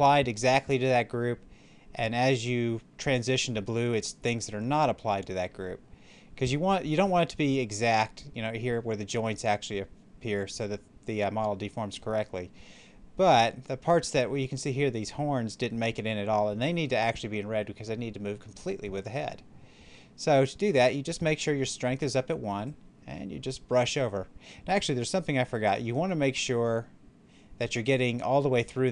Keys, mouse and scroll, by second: 22.6-26.5 drag.